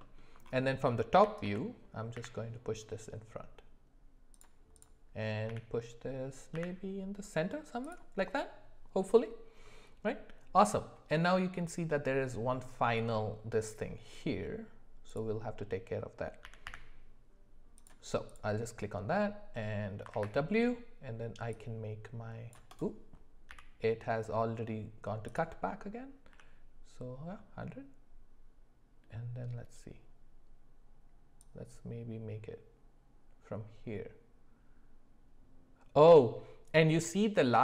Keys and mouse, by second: 0.0 alt+middle click, 1.1 g, 4.7 click, 5.5 g, 16.4 g, 20.1 alt+w, 21.5-22.9 drag, 23.5 d, 26.3 d, 31.4-37.6 drag.